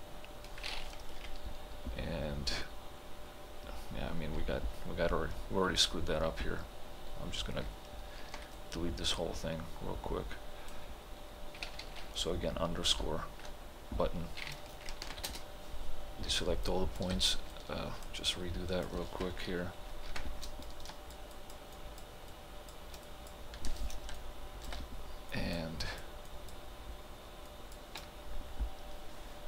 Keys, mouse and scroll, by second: 8.2 shift+-, 8.3 ctrl+g, 8.6-13.3 right drag, 13.3 shift+-, 15.1 ctrl+g, 15.3 space, 16.7 alt+click, 17.5-20.1 alt+drag, 20.1 ctrl+b, 20.9 shift+click, 24.2 alt+click.